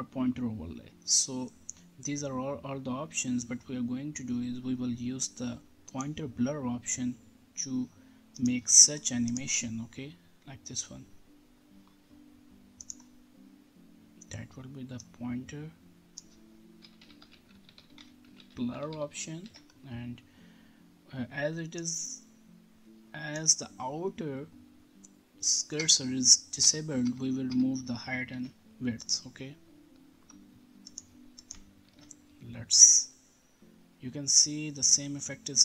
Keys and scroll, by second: 16.5-19.4 typing, 19.4 ctrl+s, 25.7 BackSpace, 28.3 ctrl+s, 31.8 ctrl+r.